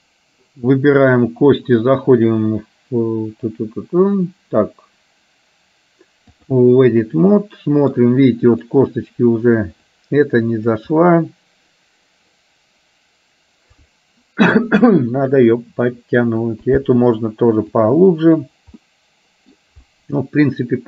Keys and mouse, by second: 1.1 click, 2.3-6.8 drag, 7.1-8.1 middle drag, 10.1 click, 11.1-16.3 middle drag, 16.8 click, 17.8 click, 18.9 middle click.